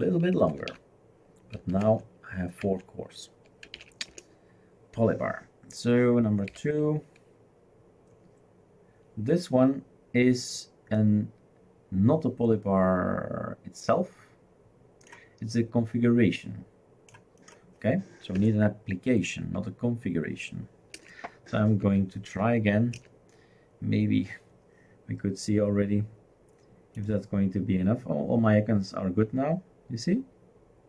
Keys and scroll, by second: 0.0-2.2 typing, 2.6 Tab, 3.4-4.6 typing, 6.5 2, 18.4 Return, 20.9 Return, 21.8 Return, 23.0 Return.